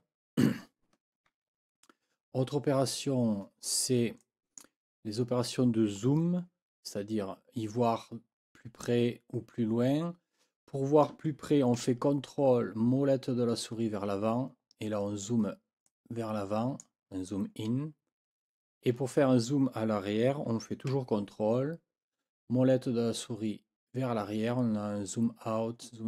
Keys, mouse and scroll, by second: 4.2 click, 14.2-14.6 ctrl+scroll up 2, 15.0 ctrl+scroll down 2, 15.8-17.0 ctrl+drag, 17.7 scroll up 2, 18.3 scroll down 2, 23.0-23.4 ctrl+scroll down 2, 25.8 ctrl+scroll up 2.